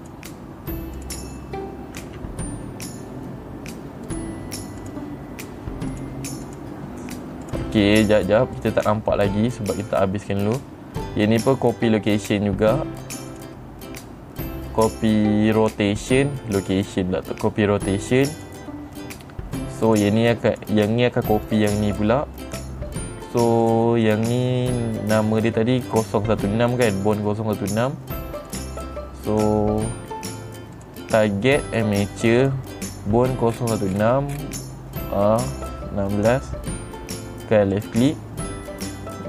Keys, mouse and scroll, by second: 0.5 click, 1.5 click, 2.5 r, 4.6 right click, 5.3 click, 6.4 click, 7.0 click, 8.0 click, 9.1 click, 12.7 click, 13.8 click, 18.8 click, 20.4 click, 21.0 click, 22.0 click, 24.2 click, 24.6 click, 29.0 click, 31.3 click, 32.2 click, 32.9 click, 34.0 middle click, 34.4 middle click, 34.8 middle click, 38.3 click.